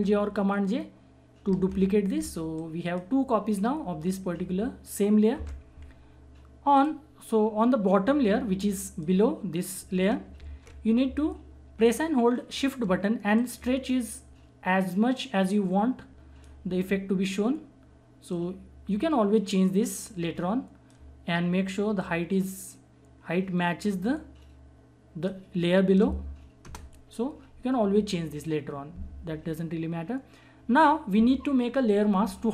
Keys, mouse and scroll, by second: 1.4 ctrl+j, 2.5-5.3 drag, 5.3 ctrl+z, 6.7 click, 10.4 ctrl+z, 13.3 shift+click, 13.4-26.6 shift+drag, 26.6 Return.